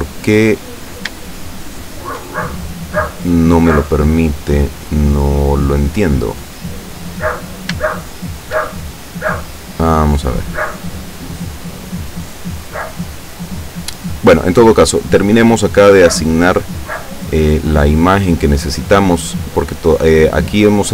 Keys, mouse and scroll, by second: 0.3 shift+middle click, 1.3-2.4 shift+middle drag, 2.5-7.9 shift+middle drag, 16.5 click, 18.9 click.